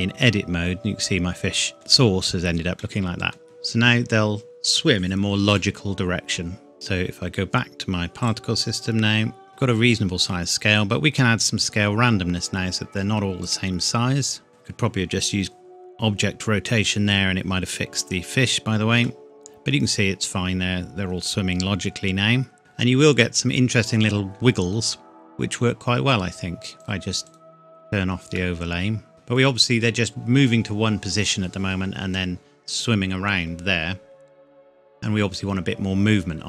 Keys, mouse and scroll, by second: 0.2-0.8 scroll up 1, 0.8 scroll down 1, 1.4 click, 1.7 middle click, 2.7 scroll up 1, 2.8 middle click, 3.4 click, 5.6 middle click, 6.7 click, 8.2 click, 8.7-9.5 scroll down 1, 10.7 click, 18.4-19.0 scroll up 1, 19.0 middle click, 23.1-23.6 scroll up 1, 25.3 scroll down 1, 26.8 click, 28.3 middle click.